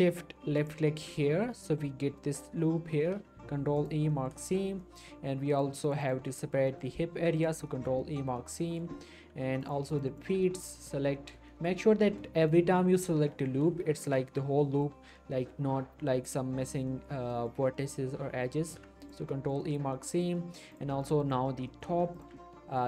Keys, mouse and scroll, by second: 0.6 ctrl+shift+click, 3.2 ctrl+e, 3.8 click, 4.1 middle click, 4.2 scroll up 1, 4.5 shift+middle click, 5.5 click, 5.9 alt+shift+click, 6.7 middle click, 7.1 ctrl+e, 7.4 click, 7.7 middle click, 8.0-9.2 shift+middle click, 9.0 shift+scroll up 2, 9.6 click, 9.9 alt+shift+click, 10.4 alt+shift+middle click, 10.9-11.7 shift+scroll up 3, 11.2 middle click, 11.5 shift+middle click, 12.2 middle click, 14.0 alt+shift+click, 14.6 middle click, 15.5 middle click, 18.6 ctrl+e, 19.0 click, 19.3 scroll down 1, 19.6 middle click, 20.1 shift+scroll up 1, 20.2 middle click, 20.7 click, 21.0 alt+shift+click, 22.1 alt+shift+click, 22.4-22.8 shift+middle click.